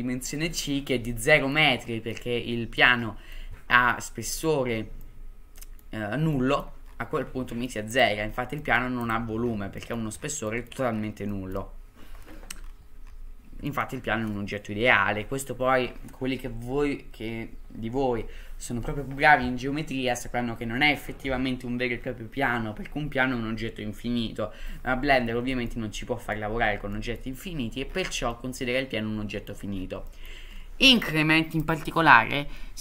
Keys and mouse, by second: 1.3 middle drag, 2.1-2.8 middle drag, 3.3-4.5 middle drag, 5.0-5.8 middle drag, 6.3 middle drag, 7.5 middle drag, 7.9 click, 8.6 middle drag, 9.8 middle drag, 10.5 middle drag, 11.3 middle drag, 13.7 middle drag, 25.7-26.3 middle drag, 26.9 middle drag, 28.3-29.5 middle drag, 30.1 middle drag, 31.6-32.8 drag.